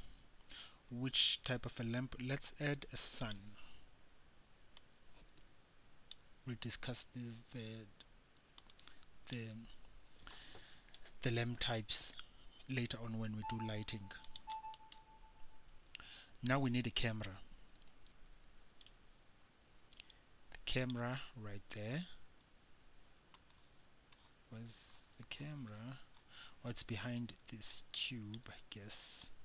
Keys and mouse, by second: 5.0-6.3 drag, 6.3 middle click, 8.8 click, 8.9 middle click, 9.5-14.9 drag, 14.9-18.1 right drag, 18.1 shift+a, 26.3-27.9 middle drag, 27.9-29.4 drag.